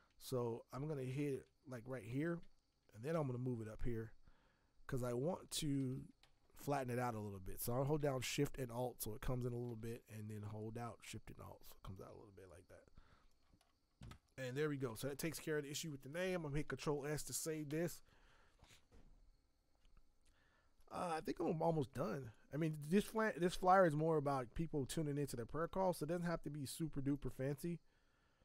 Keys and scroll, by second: 1.3 b, 3.1 v, 5.8 ctrl+t, 16.9 ctrl+s.